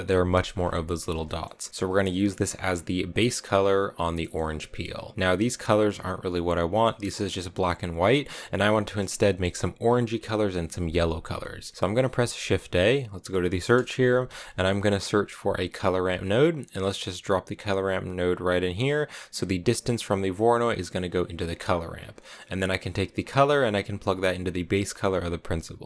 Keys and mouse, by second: 1.2 shift+click, 4.1 middle click, 8.5 click, 11.3 middle click, 12.1 shift+a, 18.5 click, 20.7 click, 21.3 middle click, 21.6 click, 22.1 middle click, 23.1-25.5 drag.